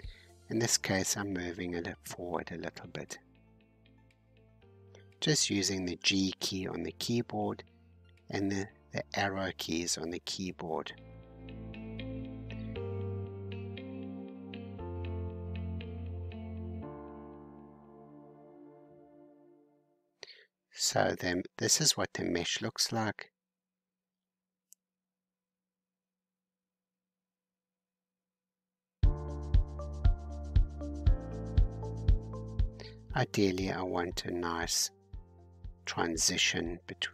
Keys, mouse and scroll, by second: 0.5-1.1 scroll down 3, 1.1-2.5 middle drag, 2.5 g, 7.2-8.8 middle drag, 8.8-9.5 scroll down 2, 9.5-10.9 middle drag, 10.9 scroll down 1, 12.1-13.2 drag, 13.2-14.4 middle drag, 14.4-15.0 scroll up 2, 18.5 Tab, 19.1-23.2 middle drag, 23.2-24.0 scroll down 2, 24.0 Tab, 24.7-26.7 middle drag, 26.7-27.7 scroll up 1, 27.7-30.7 middle drag, 33.6-36.6 middle drag.